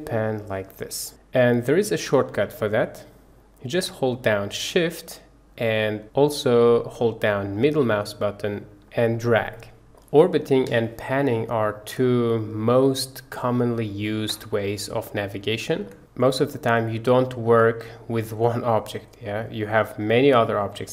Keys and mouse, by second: 9.0-9.9 shift+middle drag, 10.0-10.6 middle drag, 10.8-11.9 shift+middle drag, 12.0-13.4 middle drag, 13.7-14.2 shift+middle drag, 14.4 middle drag, 15.0 shift+middle click, 15.5 shift+click, 15.9 click, 16.5 click.